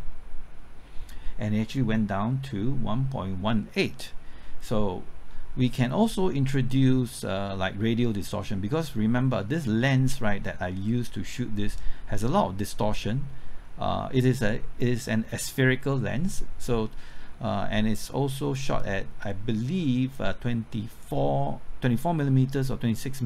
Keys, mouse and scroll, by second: 10.1-10.4 scroll up 1, 10.4 scroll down 1.